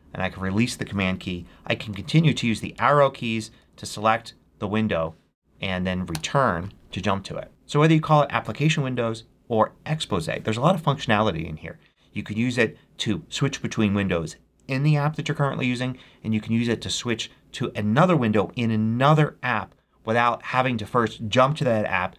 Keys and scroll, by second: 1.8 Right, 2.6 Down, 6.0 Return.